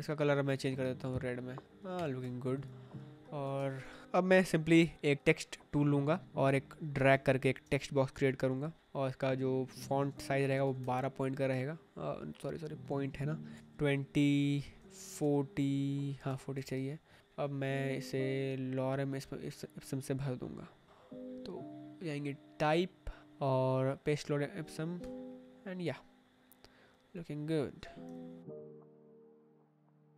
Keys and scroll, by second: 1.8 Escape, 2.7 shift+Down, 3.5 space, 7.0 space, 10.5 1, 10.7 Return, 13.4 2, 13.6 Return, 14.6-16.4 typing, 16.2 Escape, 24.9 Escape, 28.0 Escape, 29.6 Escape, 29.9 v.